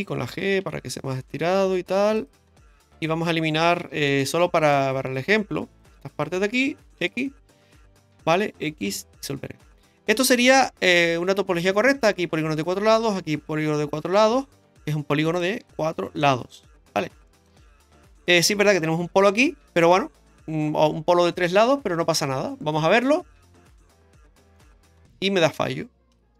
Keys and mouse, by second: 0.5 g, 2.9 right click, 3.9 2, 4.1 right click, 4.6 shift+right click, 6.1 shift+right click, 7.0 x, 8.1 right click, 8.8 x, 9.7 shift+middle click, 15.3 right click, 15.7 shift+right click, 16.1 shift+right click, 16.5 middle click, 17.4 shift+right click, 17.7 shift+middle click, 24.6 middle click, 26.1 KP_Decimal.